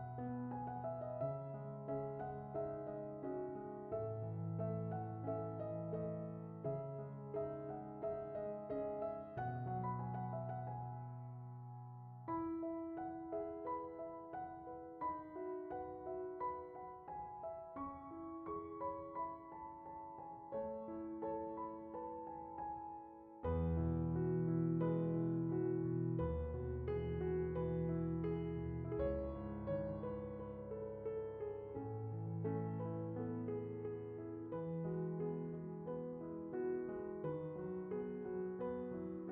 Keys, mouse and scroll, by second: 0.0 right click, 0.6 middle click, 1.4 click, 1.8 middle click, 2.9-5.6 drag, 8.2 ctrl+click, 9.0-10.8 middle drag, 10.8 click, 11.4 ctrl+t, 12.6-15.3 middle drag, 15.3-15.8 drag, 19.6-20.3 scroll down 4, 20.3 click, 21.6 middle click, 23.7 middle click, 24.4 middle click, 24.9 scroll down 1, 25.1 middle click, 26.0-26.3 scroll up 4, 27.1-29.3 drag, 30.9-31.3 drag, 31.7-32.2 middle drag, 32.9 scroll down 1, 33.1 middle click, 33.3-33.9 shift+middle drag, 33.9-34.3 drag, 35.5 click, 35.9-36.9 shift+middle drag, 39.0-39.3 drag.